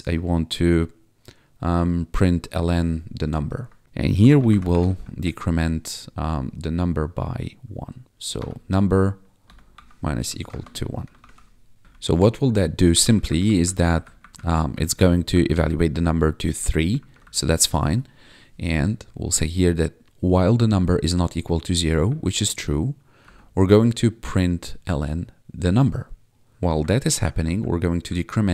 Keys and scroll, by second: 2.5 Tab, 3.9-5.3 typing, 8.3 -, 9.4 =, 9.7 1, 10.4 Left, 10.4 space, 10.6 Right, 10.9 ;, 11.1 ctrl+s, 11.8 Down, 13.6 Left, 13.9 Down, 14.0 Left, 14.1 Up, 14.3 Left, 16.5 ctrl+Right, 16.9 Left, 17.2 Down, 20.5 ctrl+Right, 22.0 Up, 24.8 Down, 27.0 ctrl+shift+Left.